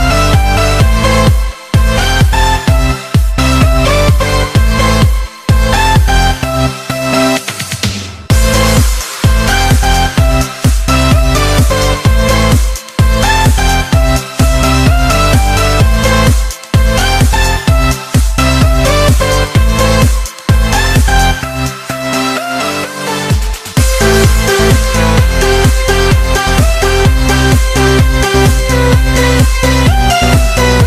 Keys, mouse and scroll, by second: 0.1 click, 5.5 click, 6.0 ctrl+z, 6.3 ctrl+z, 6.7 ctrl+z, 7.3 ctrl+z, 7.9 ctrl+z, 8.6 Tab, 9.5-13.1 drag, 15.5 click, 16.0-17.7 scroll up 1, 17.7 Tab, 18.2 click, 19.3 b, 20.7-24.4 drag, 26.1-27.4 drag, 27.7 Tab, 28.6 Tab, 30.2 click.